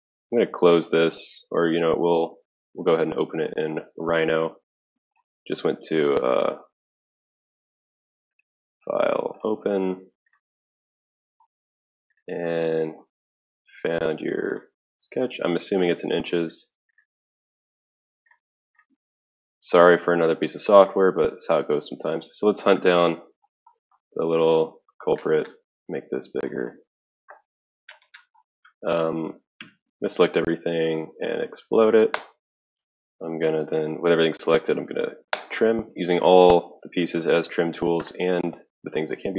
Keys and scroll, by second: 2.8 alt+Tab, 3.6 alt+Tab, 7.1 ctrl+q, 29.5 ctrl+a, 30.8-32.6 typing, 34.3-35.4 typing, 38.0-38.7 typing.